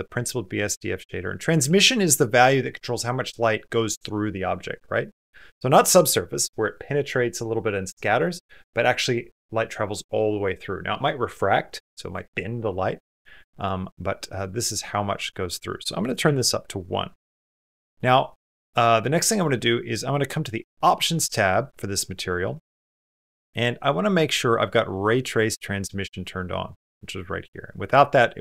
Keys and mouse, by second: 15.3 click, 17.7 middle click.